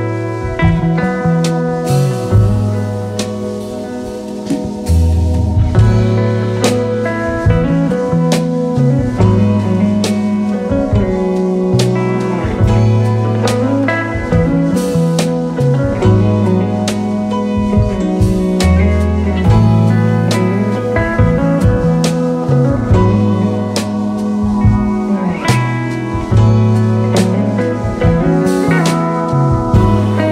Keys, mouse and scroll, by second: 0.0-3.3 typing, 4.5-5.3 typing, 9.8 alt+scroll down 1, 10.2 space, 11.2 o, 14.8-16.0 typing, 15.9 alt+scroll up 1, 18.8 Delete, 21.2 Delete, 22.3-23.1 scroll down 5, 23.1 Delete, 24.1 Delete, 25.2 Delete, 26.3 Delete, 26.9 space, 28.4 right click, 29.6 double click.